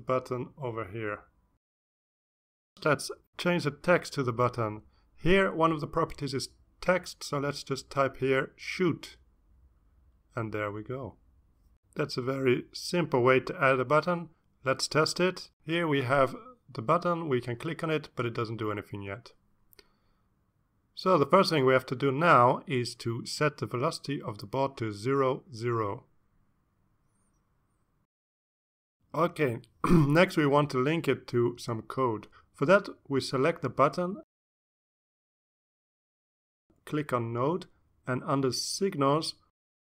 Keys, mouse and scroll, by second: 0.4 click, 1.2 click, 2.1-3.1 drag, 3.4 click, 4.1 click, 5.4 click, 6.1-7.8 typing, 8.0 Return, 9.1 click, 9.8 click, 10.4 click, 13.1 ctrl+s, 14.4 click, 16.5 click, 18.6 click, 21.4 click, 22.0 click, 24.1-24.7 scroll down 2, 25.0 click, 25.7 0, 26.1 Tab, 26.4 0, 26.8 Return, 27.6 click, 28.2 ctrl+s, 28.8-29.5 ctrl+scroll down 6, 29.6 ctrl+scroll up 2, 30.2-30.7 drag, 30.8-31.3 ctrl+scroll down 4, 31.9-33.0 drag, 34.9 click, 37.9 click.